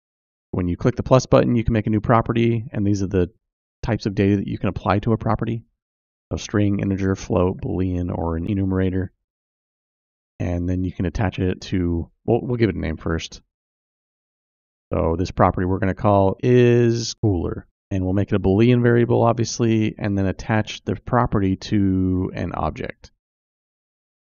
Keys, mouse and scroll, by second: 0.6 click, 4.0-11.1 drag, 12.4 click, 12.8 click, 14.2 click, 14.3-20.9 drag, 16.1 o, 16.8 o, 21.6-24.2 drag.